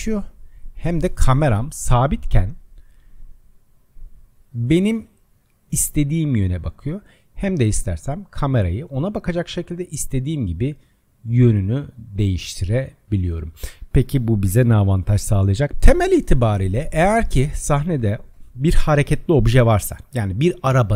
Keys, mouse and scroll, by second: 2.8 click, 5.6 click, 7.1-10.9 middle drag, 15.7 click, 16.3-19.4 middle drag.